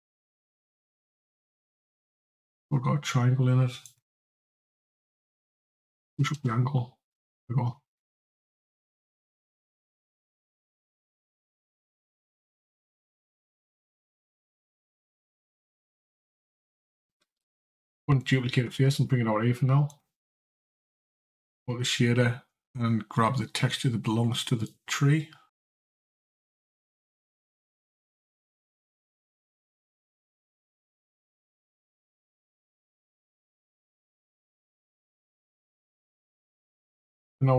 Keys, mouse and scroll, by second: 0.5 click, 3.7 click, 10.2 click, 11.8 click, 17.0 shift+d, 19.7 click, 33.9-35.2 scroll up 2, 35.2 click.